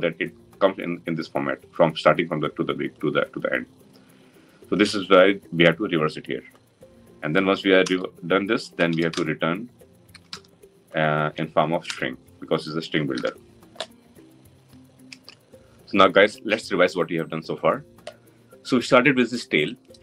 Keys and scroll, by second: 11.7 Return, 12.9 ctrl+alt+l.